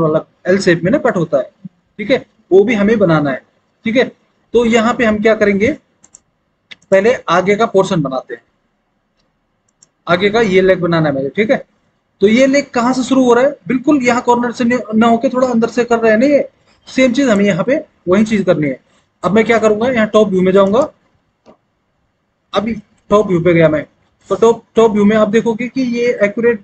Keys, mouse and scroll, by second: 19.0 alt+w, 23.4 alt+w.